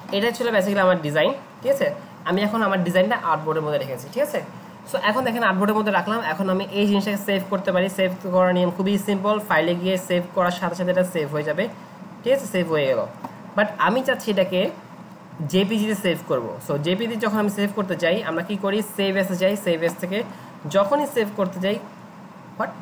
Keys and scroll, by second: 2.3 ctrl+0.